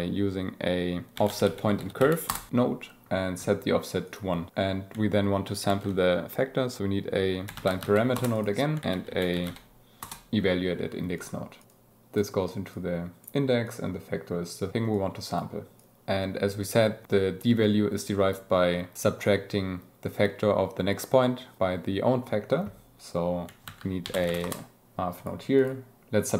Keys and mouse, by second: 1.4 f, 4.0 click, 5.6 shift+a, 6.8 BackSpace, 7.7 a, 8.8 shift+a, 11.1 click, 12.7 click, 13.6-14.5 drag, 14.9 click, 15.7 click, 16.0 g, 23.6 shift+a, 25.1 click, 25.5-26.3 drag.